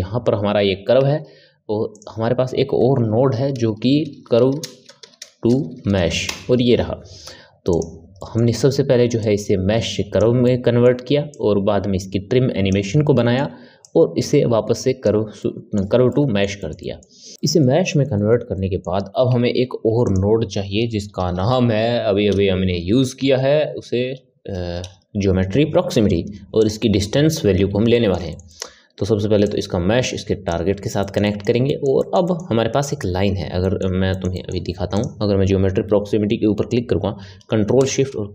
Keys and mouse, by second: 0.9 shift+a, 8.1-9.1 middle drag, 9.1 click, 10.3 middle click, 11.2 click, 13.0 middle click, 13.7 click, 15.3-19.5 middle drag, 19.5 shift+a, 22.8 Down, 27.9-29.4 middle drag, 29.4 click, 31.0-34.9 ctrl+middle drag, 34.9 click, 37.8 ctrl+shift+click.